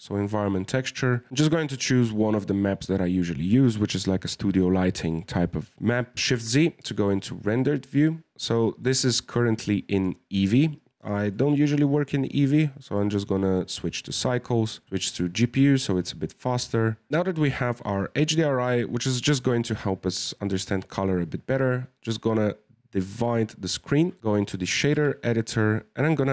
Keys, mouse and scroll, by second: 6.8 shift+z, 7.5-8.8 middle drag, 8.8-9.1 scroll down 1, 9.1-10.2 middle drag, 10.2-11.3 scroll up 4, 11.3 click, 12.2-17.1 drag, 19.7-24.9 drag, 24.9 n, 26.0 click.